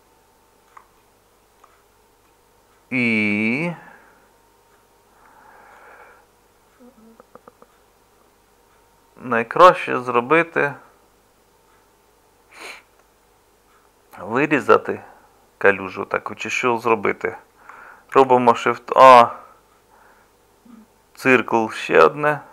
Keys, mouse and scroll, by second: 18.2 shift+a.